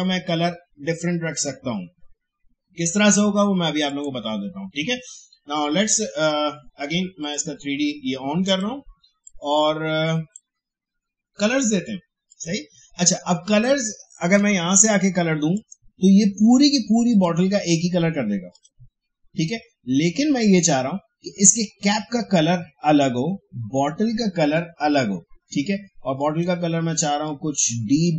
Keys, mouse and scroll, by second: 3.9 click, 7.2 click, 9.0 space, 9.2 click, 9.5 space, 12.3 click, 21.6 click, 26.1-28.1 drag.